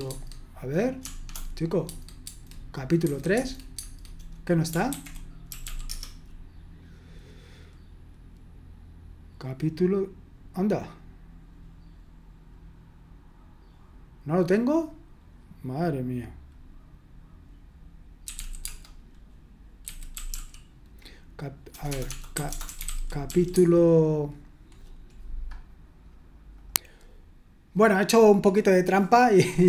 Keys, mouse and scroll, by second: 0.1 Tab, 1.0 BackSpace, 1.2 BackSpace, 1.9 Tab, 2.3 Tab, 3.1 3, 3.3 Tab, 3.7 Tab, 4.9 ctrl+c, 5.3-6.2 typing, 18.0-20.8 typing, 21.9-23.8 typing, 26.6 click.